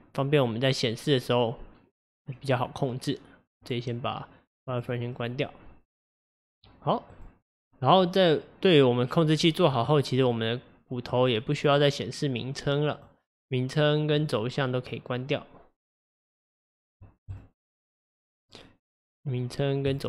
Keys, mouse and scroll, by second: 3.6-5.2 drag, 5.2-7.1 middle drag, 7.1 click, 10.3 click, 11.6 click, 13.0-14.3 drag, 17.3 click, 18.3 click, 19.9 click.